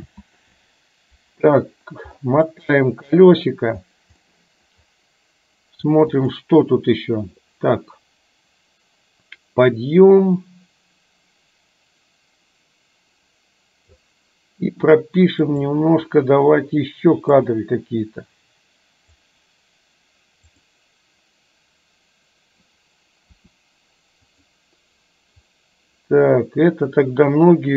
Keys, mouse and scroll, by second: 0.0 ctrl+z, 2.6 middle click, 4.4 middle click, 6.3 click, 7.9-14.0 drag, 15.5 click, 17.5 click, 17.9-19.3 drag, 20.6 click, 23.4 r.